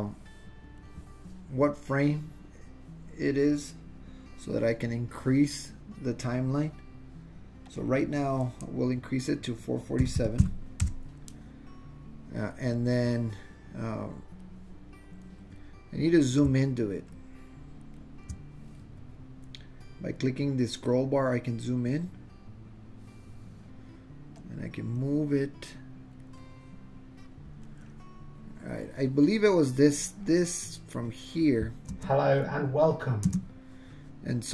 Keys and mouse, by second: 7.7-12.1 drag, 10.3 KP_4, 12.8-14.6 drag, 17.0 shift+middle click, 19.8 click, 21.5-22.9 drag, 24.5 click, 26.4-27.7 middle drag, 30.1-31.4 drag, 31.9 space, 33.3 space.